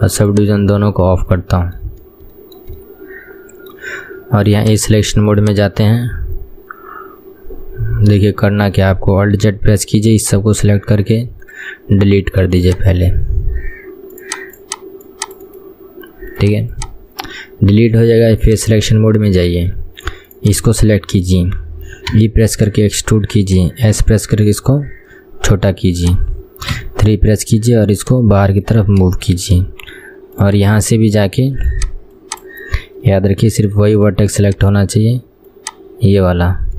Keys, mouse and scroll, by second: 0.3 click, 1.0-1.5 scroll up 2, 1.5-4.1 shift+middle drag, 4.1 KP_1, 4.7 click, 8.3 scroll down 1, 8.4-9.5 shift+middle drag, 9.5 alt+z, 10.7 click, 14.3 click, 16.9 click, 18.5 click, 18.9-19.5 scroll up 4, 19.5 shift+middle click, 20.5 click, 21.1-22.3 scroll down 3, 22.3 e, 24.1 s, 26.9 KP_3, 27.3-28.1 scroll up 2, 28.1 click, 29.4-30.5 shift+middle drag, 30.5 click, 30.8-31.8 scroll up 2, 31.8 click, 32.5 click, 32.7-34.1 middle drag, 34.1-34.5 scroll up 2, 34.5 click, 36.3 click.